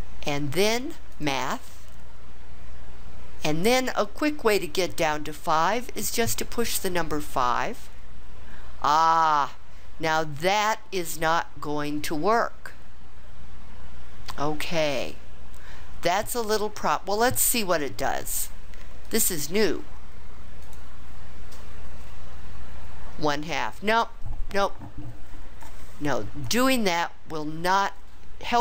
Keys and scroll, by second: 6.6 5, 18.4 1, 19.0 6, 20.6 Return.